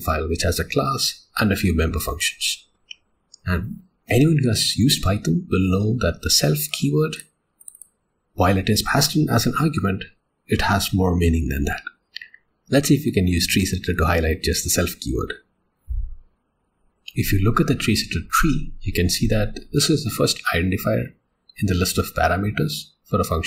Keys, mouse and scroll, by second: 7.1 click, 7.8 double click.